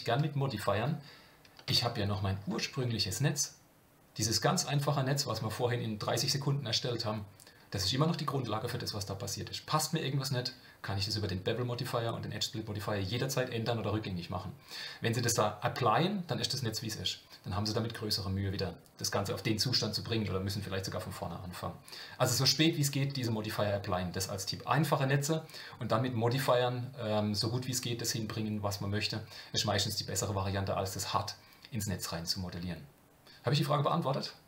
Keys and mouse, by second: 1.7 Tab, 2.8-5.3 middle drag.